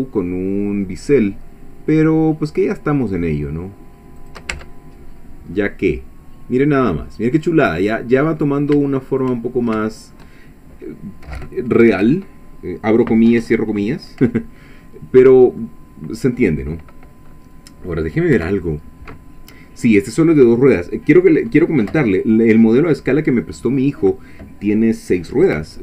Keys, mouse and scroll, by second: 4.2 shift+click, 4.5 Tab, 5.1-5.4 shift+scroll down 2, 5.6-7.5 middle drag, 7.8 scroll down 2, 7.9 middle click, 7.9 click, 8.9 shift+click, 9.5 shift+scroll down 1, 9.9 shift+middle click, 15.3 scroll down 1, 15.6-16.8 middle drag, 18.3 1, 20.5 middle click, 24.0-24.3 scroll down 2.